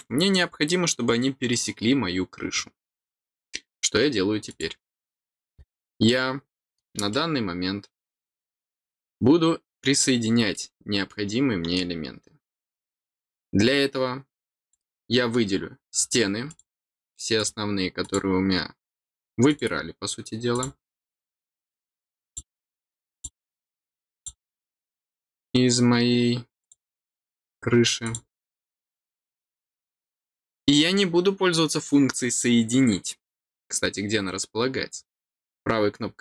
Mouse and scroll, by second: 4.4 click, 5.5 scroll down 1, 6.0 middle click, 7.0-8.9 middle drag, 10.5-11.7 middle drag, 14.6 click, 16.4 click, 17.3 click, 18.0 click, 19.4 click, 20.5 click, 21.3 click, 22.2 click, 23.1 click, 24.1 click, 25.2 click, 26.5 click, 28.0 click, 29.0 click, 35.2 right click.